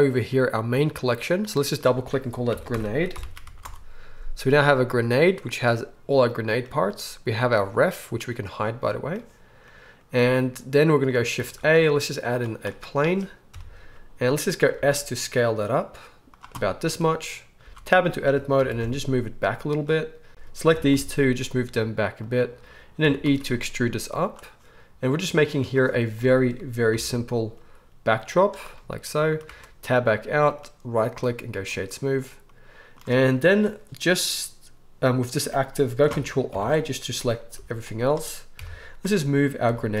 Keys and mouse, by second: 0.1 middle click, 0.2-1.4 right drag, 1.4-6.2 middle drag, 6.5 middle click, 8.4 middle click, 11.4 shift+a, 13.5 KP_1, 14.4-20.3 drag, 14.7 s, 17.6 Tab, 18.6 g, 20.3 ctrl+z, 20.3-25.2 middle drag, 20.6 g, 23.0 e, 25.2 click, 26.2-31.0 middle drag, 26.9 ctrl+b, 29.4 Tab, 31.0-32.6 drag, 32.6-38.0 right drag, 36.5 ctrl+i, 37.5 g, 38.0-40.0 middle drag, 38.5 KP_1, 39.6 g.